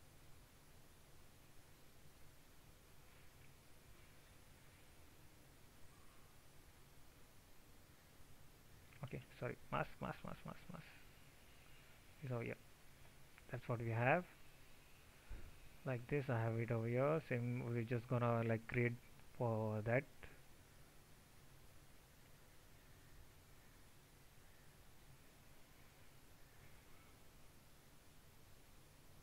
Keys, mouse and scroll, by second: 9.1 ctrl+z.